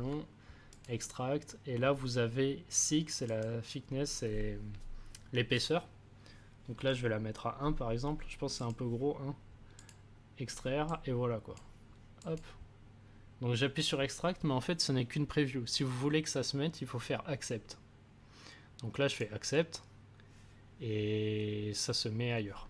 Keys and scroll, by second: 6.7 1.